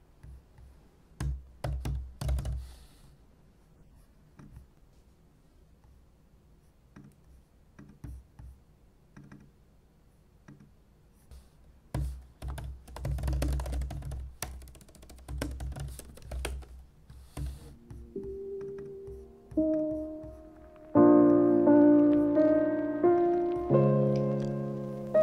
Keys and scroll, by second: 0.9-2.9 typing, 11.9 super+n, 12.1-16.5 typing, 16.3 super+v, 17.3 super+e.